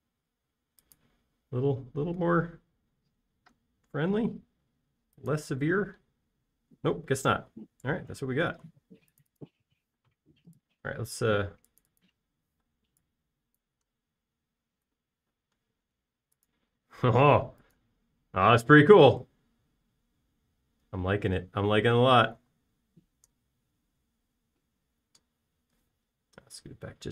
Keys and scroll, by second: 7.4 space, 11.4 p, 13.0-14.0 typing, 15.3 space, 18.9 space.